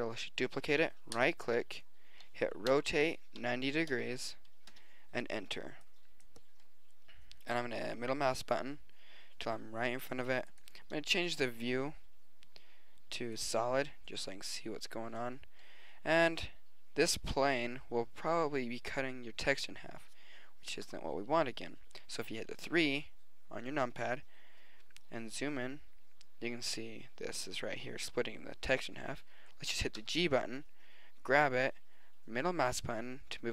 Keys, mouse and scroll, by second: 2.7 r, 5.9 click, 18.5-20.3 middle drag, 20.9 KP_3, 25.1-27.5 middle drag, 30.0 g.